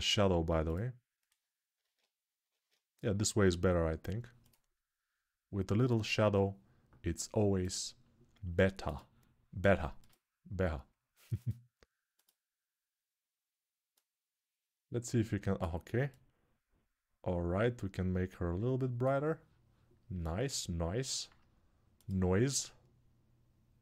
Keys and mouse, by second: 1.6 ctrl+Tab, 3.4 ctrl+Tab, 4.3-7.4 middle drag, 7.4 click, 7.5-8.8 middle drag, 8.8-21.9 drag, 21.9-23.8 alt+middle drag.